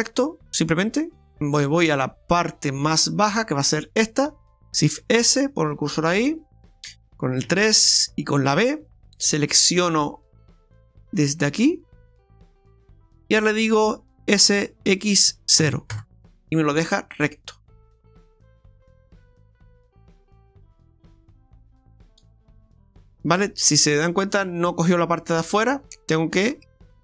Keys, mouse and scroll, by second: 2.3 click, 3.8 right click, 5.0 shift+s, 7.4 KP_3, 9.2 b, 13.1 middle click, 14.4 s, 16.8-17.1 scroll down 2, 17.1 middle click, 21.1-21.5 scroll up 3, 21.8-22.1 scroll down 2, 22.1 middle click, 23.7 middle click, 25.4 middle click, 26.7 ctrl+z.